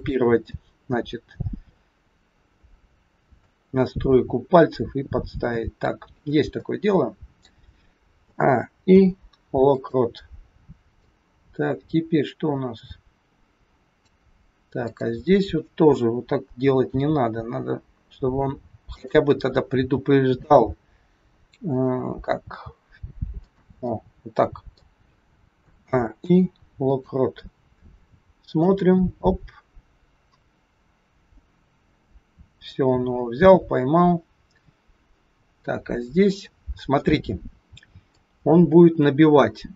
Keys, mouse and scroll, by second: 0.5 middle click, 3.8 middle click, 6.2 scroll down 1, 6.5 middle click, 8.3 a, 8.8 i, 10.9 click, 14.8 click, 16.9 g, 19.3 middle click, 19.3 scroll up 1, 20.7 scroll down 1, 21.7 click, 22.4 g, 23.8 middle click, 25.7 a, 26.2 i, 28.5 click, 36.3 middle click, 38.2 click.